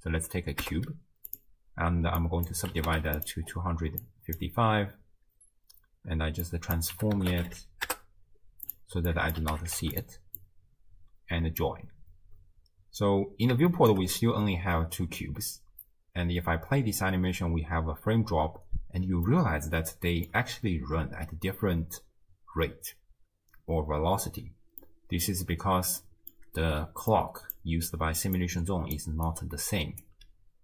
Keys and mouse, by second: 2.2-3.3 drag, 3.0 5, 4.1 click, 6.5-8.8 drag, 9.1 click, 9.7 5, 9.8 5, 10.4-11.7 drag, 13.9 shift+middle click, 16.3 space, 19.5-20.0 shift+drag, 20.0 shift+middle click, 24.3 space, 24.8 middle click, 26.0 click, 26.1 middle click, 26.2 click, 27.2 click, 27.9 d, 28.4 click, 28.4-29.2 d, 29.3 click, 30.1 d, 30.2 d.